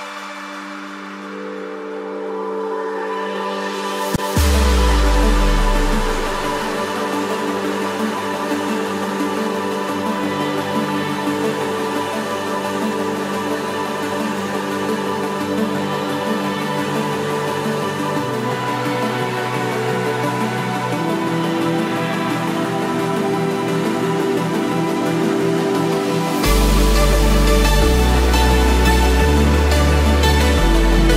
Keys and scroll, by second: 20.5 ctrl+=, 24.6 ctrl+z, 30.6 ctrl+a, 31.0 Delete.